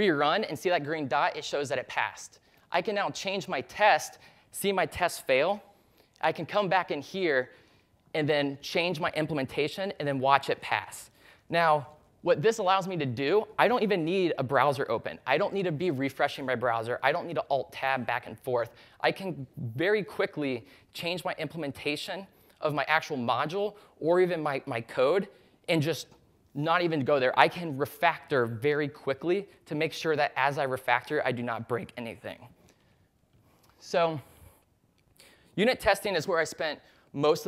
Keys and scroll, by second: 2.1-2.9 typing, 3.3 super+s, 10.7-11.5 typing, 33.0 super+s.